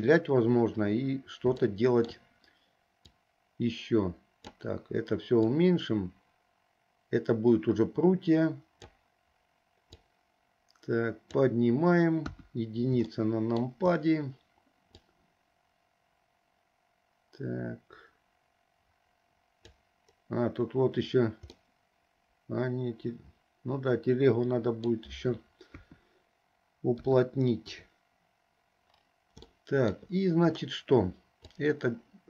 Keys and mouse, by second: 1.8 shift+middle click, 3.3-4.6 drag, 5.7-9.0 drag, 10.0-11.5 drag, 12.3 KP_1, 13.3 shift+middle click, 15.2-19.8 drag, 21.7-22.7 middle drag, 25.8 KP_2, 27.1 KP_1, 27.8 KP_3, 29.7 shift+middle click, 31.6-32.2 drag.